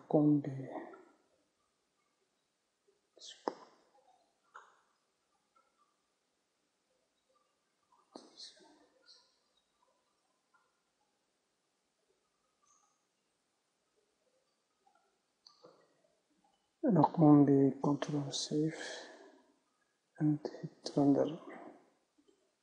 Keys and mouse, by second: 15.5-18.7 drag, 17.6 a, 18.7 ctrl+s, 21.9 click.